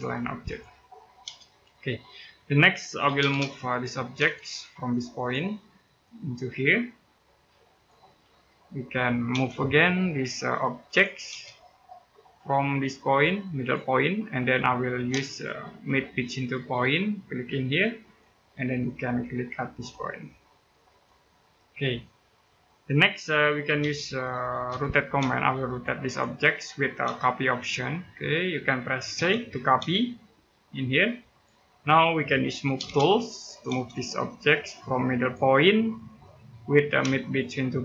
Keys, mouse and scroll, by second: 0.6-1.0 scroll down 1, 1.0 space, 1.5 middle click, 2.0 scroll up 1, 2.8 m, 3.0 space, 3.5 click, 3.9 space, 4.2-4.7 scroll up 1, 4.9 click, 5.2-5.5 scroll down 1, 5.5 middle click, 5.9-7.3 scroll up 1, 7.5 click, 7.9 scroll down 1, 8.1 middle click, 9.1 space, 10.6 click, 11.1 space, 11.6-12.6 scroll up 1, 13.3 click, 13.7 scroll down 1, 14.0 middle click, 14.4-14.9 scroll up 1, 15.1 right click, 16.3 click, 18.6 middle click, 20.6 click, 21.2-21.8 scroll down 1, 21.8 middle click, 23.6-25.0 typing, 25.5 click, 26.8 space, 27.4 click, 28.9 c, 29.6 space, 31.0 click, 31.9-32.4 scroll up 1, 32.4 m, 32.6 space, 32.9 click, 33.5 space, 33.6-33.9 scroll up 1, 35.0 click, 35.3-35.6 scroll down 1, 35.6 middle click, 36.2-36.7 scroll up 1, 37.0 shift+right click.